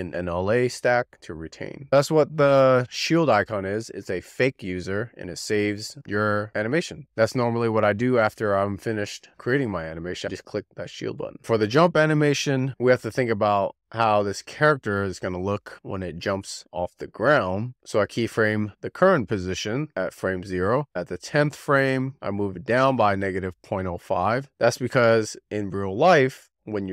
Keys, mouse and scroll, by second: 9.9-10.8 scroll down 1, 10.8-11.3 scroll up 1, 12.3 click, 15.1-15.8 drag, 16.5 z, 17.3 shift+middle click, 17.7 click, 18.0 i, 21.1 click, 23.0 click.